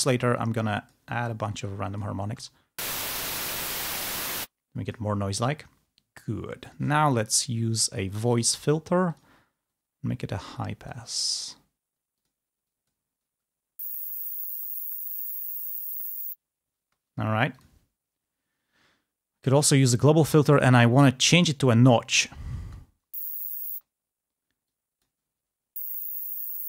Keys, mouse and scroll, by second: 0.5 click, 1.6 click, 2.5 space, 4.7 space, 5.0 click, 6.8 click, 8.4 click, 9.2 click, 9.8-11.1 drag, 12.2 click, 12.7 click, 13.4 space, 17.0 space, 17.7 click, 19.6 click, 20.6 click, 21.5 click, 22.3 click, 22.6 space, 23.9 space, 24.8 click, 25.4 space.